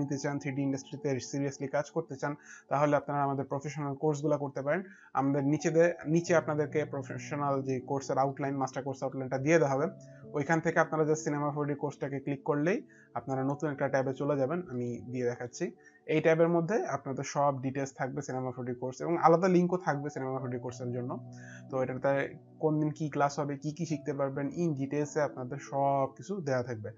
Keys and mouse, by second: 3.4 click, 7.6 click, 8.7 click, 8.7 middle click, 13.8 click, 15.0 click, 15.0 middle click, 18.4 middle click.